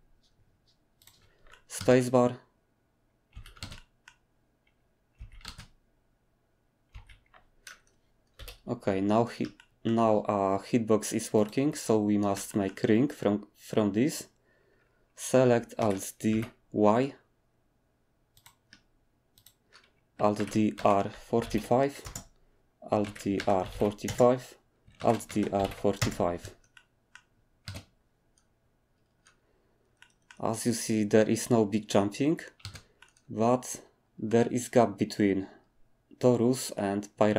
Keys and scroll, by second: 1.8 space, 3.3 Escape, 3.6 space, 5.2 Escape, 5.4 space, 6.9 Escape, 8.3 7, 15.8 alt+d, 16.3 y, 20.4 alt+d, 20.8-22.0 typing, 23.0 alt+d, 23.4-24.1 typing, 25.0 alt+d, 25.3-28.6 typing, 32.6 space.